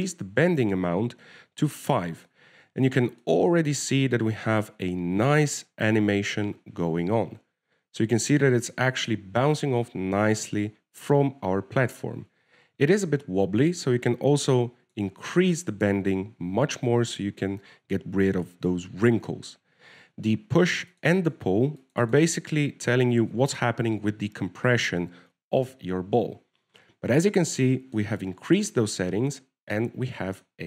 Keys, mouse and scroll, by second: 0.5 click, 4.4 middle click, 4.5 shift+middle click, 4.8 middle click, 5.4-6.6 scroll up 1, 12.0 middle click, 14.9 click, 16.9 middle click, 22.3 click, 22.5 click, 23.1 click, 23.4 click, 28.5-28.9 scroll down 2, 28.9 middle click, 29.6-30.0 scroll down 1, 30.0-30.6 scroll up 1.